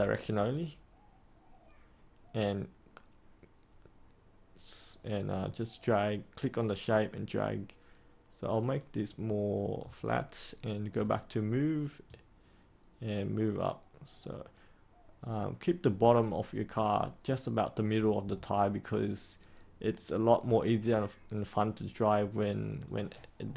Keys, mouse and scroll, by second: 18.9-21.9 drag, 22.9-23.5 drag.